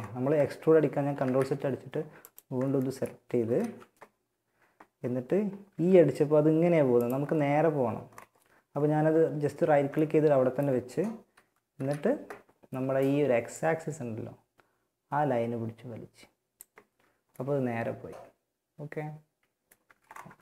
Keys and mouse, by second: 0.4 ctrl+z, 2.6 KP_1, 2.8 z, 4.9 e, 6.4-8.3 drag, 9.4-10.4 drag, 10.6 KP_3, 11.0 KP_1, 11.4 z, 11.9 z, 12.8-14.6 drag, 16.1 z, 19.0 a.